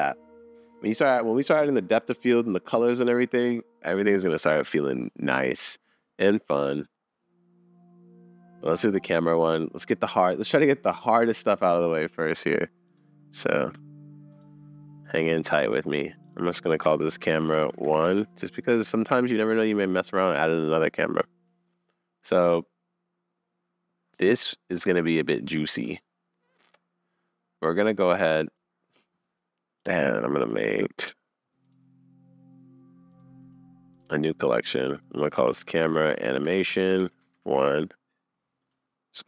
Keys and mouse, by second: 16.4-19.1 drag, 19.2 super+s, 22.2-28.5 middle drag, 33.1 click, 34.9-37.9 drag, 38.6 click.